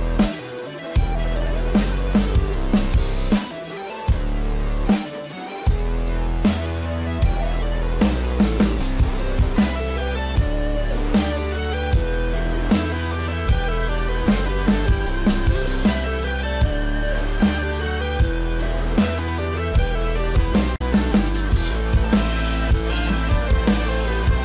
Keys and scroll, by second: 0.0 space, 1.0 ctrl+=, 1.4 space, 7.8 ctrl+=.